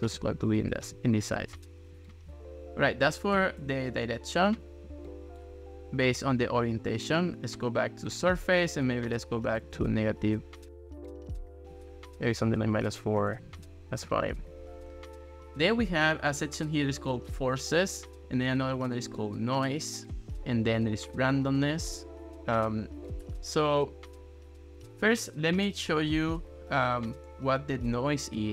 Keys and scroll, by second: 3.4 0, 3.6 Return, 9.5 1, 9.8 Return, 13.1 1, 13.3 Return.